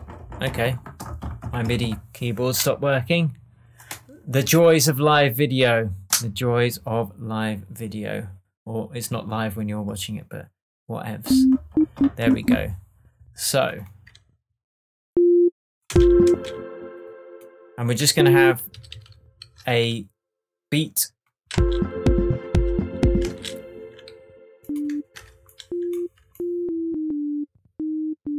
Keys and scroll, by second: 15.8 space, 18.7 super+d, 21.5 space, 23.2 space, 25.1 BackSpace, 26.1 alt+BackSpace.